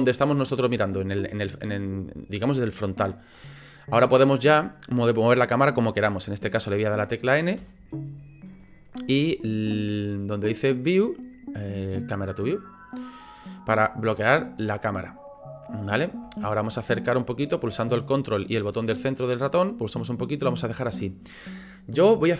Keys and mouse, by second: 7.6 n, 12.0 click, 16.4-20.9 ctrl+drag.